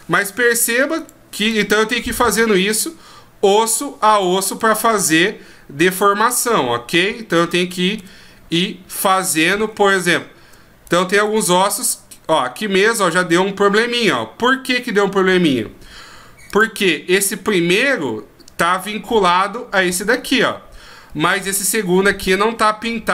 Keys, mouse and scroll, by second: 1.0 right click, 1.4 right click, 2.1 r, 4.1 right click, 4.5 right click, 5.1 r, 7.3 right click, 7.9 r, 9.6-10.9 scroll down 2, 10.9 right click, 11.2 r.